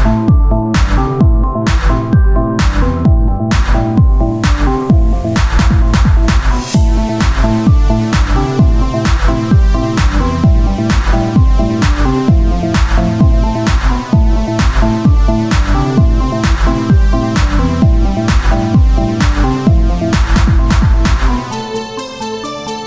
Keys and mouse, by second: 2.2 Tab, 5.0 ctrl+Tab, 6.8-8.0 drag, 8.0 Tab, 14.7 KP_3, 15.4 Tab, 17.2 r, 18.8-20.2 drag, 20.2 Tab, 21.6 KP_1, 22.2 z.